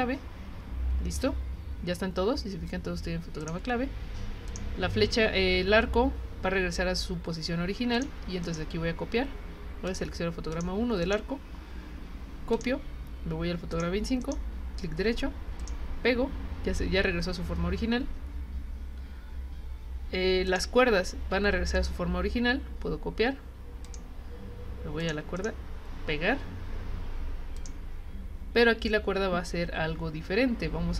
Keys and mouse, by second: 3.4 click, 4.5 click, 7.9 click, 9.9 click, 10.5 click, 12.5 click, 13.7 click, 15.6 click, 20.5 click, 21.7 right click, 23.8 click, 25.0 click, 25.3 right click, 27.6 click.